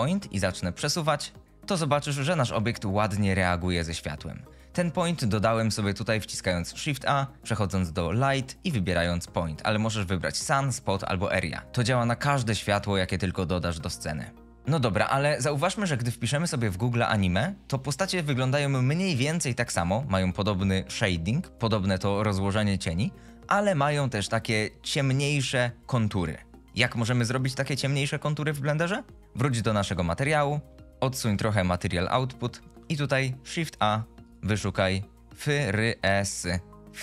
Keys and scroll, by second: 0.5 g, 6.9 shift+a, 33.9 shift+a, 35.2 f, 35.6 r, 36.2 e, 36.3 s.